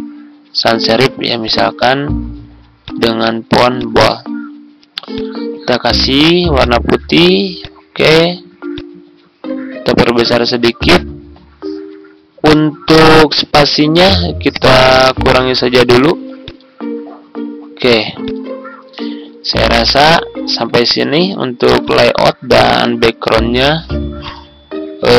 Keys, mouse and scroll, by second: 0.0-0.2 typing, 1.3 click, 12.9 click, 18.8 F4, 20.9 ctrl+z, 21.8-25.1 drag.